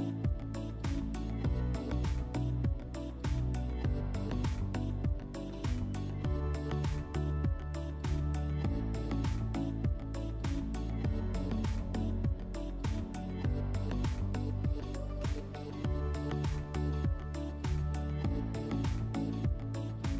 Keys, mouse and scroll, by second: 4.4 /, 14.7-16.3 drag.